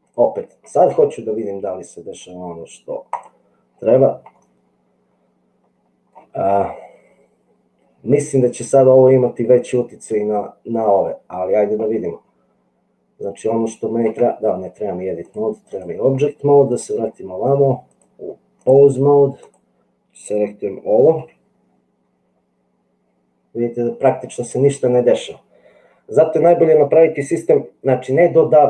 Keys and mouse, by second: 2.3-3.5 drag, 4.4-6.1 middle drag, 12.1 Tab, 14.3 Tab, 15.3 click, 18.0 click, 19.4 click, 21.1 g.